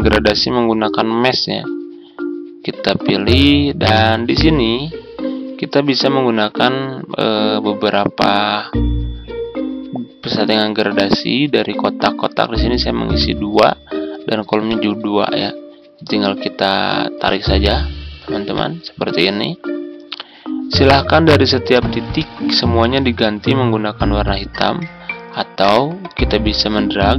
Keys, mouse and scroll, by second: 26.8-27.1 drag.